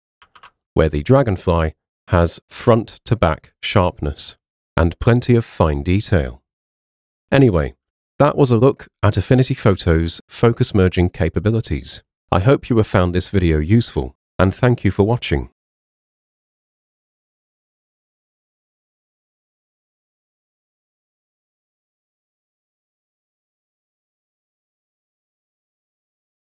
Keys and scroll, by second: 0.4 super+2, 7.9 super+0.